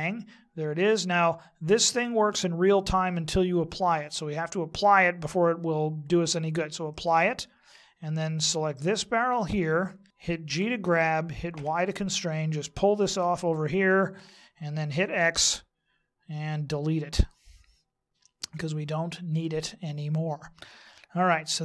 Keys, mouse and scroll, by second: 6.9 click, 8.9 right click, 10.5 g, 14.9 x, 19.4 middle click.